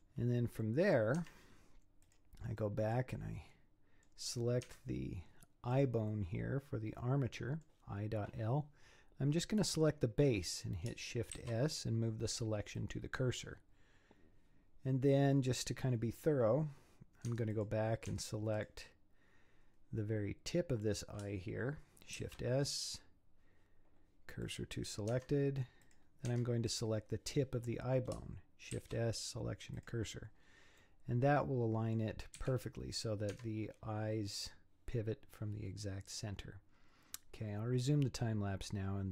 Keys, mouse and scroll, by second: 1.2 Tab, 2.0 click, 2.6-4.3 middle drag, 4.3-4.7 scroll down 4, 4.7 Tab, 5.1-5.4 scroll up 8, 5.7 click, 6.1-9.2 middle drag, 9.6 click, 11.3 shift+s, 16.0-17.3 scroll up 3, 17.3 Tab, 17.5 click, 18.1 Tab, 18.6 click, 22.2 shift+s, 25.1 Tab, 25.8 click, 26.3 Tab, 26.7 click, 28.7 shift+s, 30.4-30.8 scroll down 4, 30.8-32.4 middle drag, 32.4 z, 33.3 Tab, 33.7-34.5 scroll down 7, 35.7 scroll down 4, 36.7 scroll down 3, 38.6-39.1 scroll down 1.